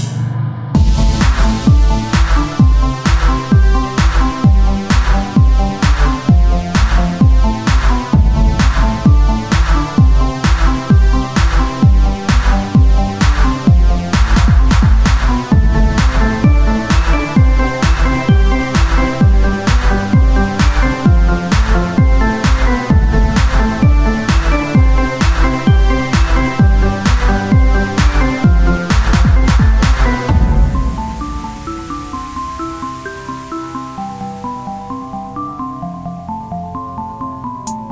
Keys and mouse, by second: 4.6-5.8 right drag, 5.8-9.2 drag, 9.2-10.4 right drag, 10.5 z, 11.2 r, 12.0 z, 14.2 r, 15.3 Tab, 16.2 click, 18.2-19.3 right drag, 19.3 click, 19.7-21.3 right drag, 21.3 click, 21.3 ctrl+z, 22.1 s, 23.8 click, 24.6 ctrl+z, 26.5-28.1 right drag, 28.1-29.3 drag, 29.1-32.7 right drag, 30.1-31.3 drag, 32.7 click, 33.9 z, 35.1 r, 36.1 z, 36.5-37.7 drag, 37.7 Tab.